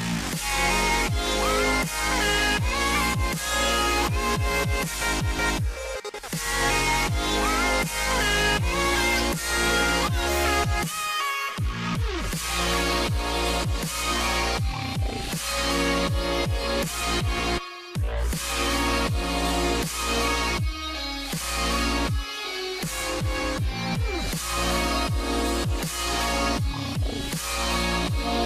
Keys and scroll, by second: 1.6 ctrl+z, 11.0 ctrl+g.